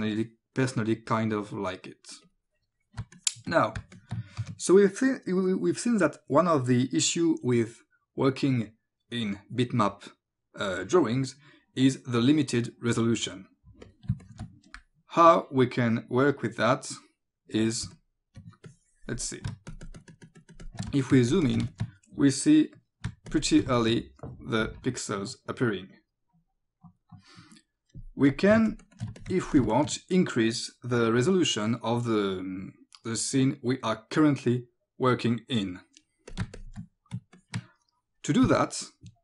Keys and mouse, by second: 2.3 click, 3.0 space, 3.2 click, 3.9 click, 4.4 ctrl+s, 13.9 click, 14.1 space, 14.2 click, 17.9 o, 17.9 click, 19.5 space, 19.7 ctrl+click, 20.3 click, 21.0 click, 21.5 click, 21.7 click, 23.1 space, 23.4 ctrl+click, 23.8 click, 28.3 click, 28.5 ctrl+space, 29.2 click, 29.4 ctrl+alt+space, 29.7 click, 36.3 click, 36.5 space, 36.6 click, 37.4 ctrl+click.